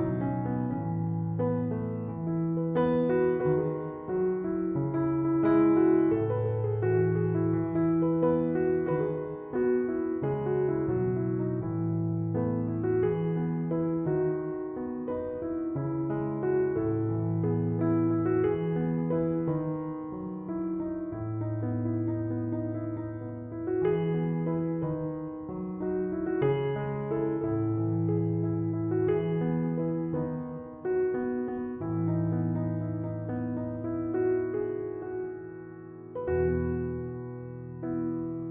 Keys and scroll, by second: 20.0 d.